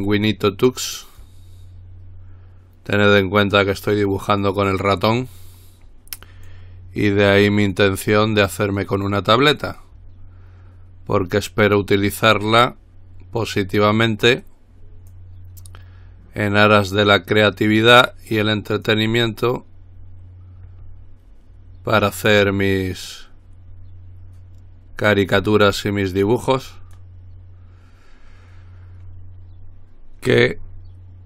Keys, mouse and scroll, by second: 1.4-4.7 drag, 6.7-8.0 drag, 10.0-11.9 drag, 12.2-13.3 drag, 15.3-19.1 drag, 30.8-31.2 scroll down 2.